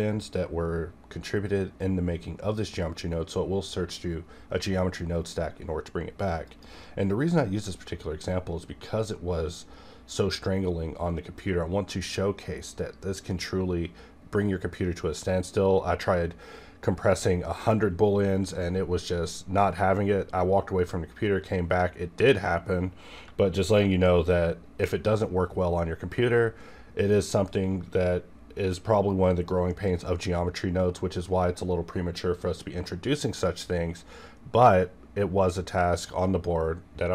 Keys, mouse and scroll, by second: 23.6-33.6 shift+drag.